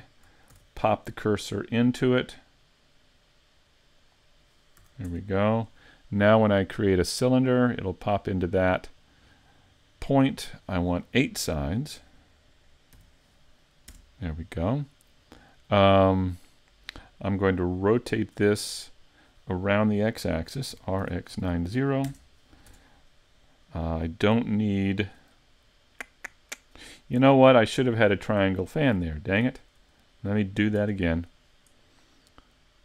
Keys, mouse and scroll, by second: 0.5 shift+s, 4.8 a, 5.1 Tab, 7.3 click, 10.6 click, 17.6 middle click, 20.7 r, 22.7 Tab, 29.5 super+z, 30.0 middle click, 30.8 Tab, 31.1 middle click.